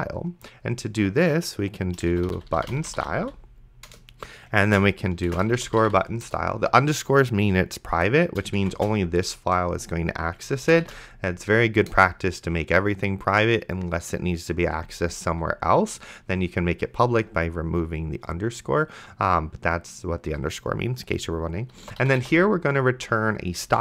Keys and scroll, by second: 2.0-6.6 typing, 3.9 Return, 8.6-9.5 typing, 10.6 space, 11.1 shift+[, 12.0 Return, 21.7-23.6 typing.